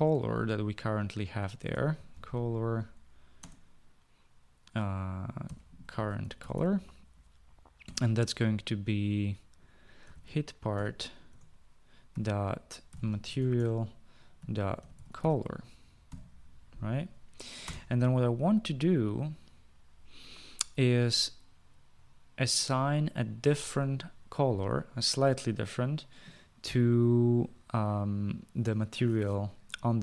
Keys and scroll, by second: 0.4 c, 1.9-3.9 typing, 5.7-8.3 typing, 10.3-16.5 typing, 11.7 Return, 18.1 Return.